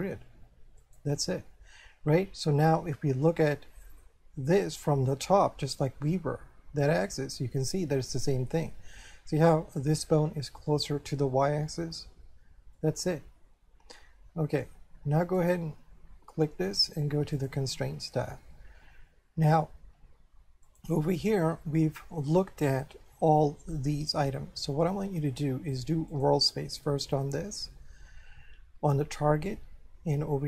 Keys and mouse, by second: 0.8 click, 3.3 middle click, 12.8 middle click, 15.4 right click, 17.4 click, 20.7 click, 26.1 click.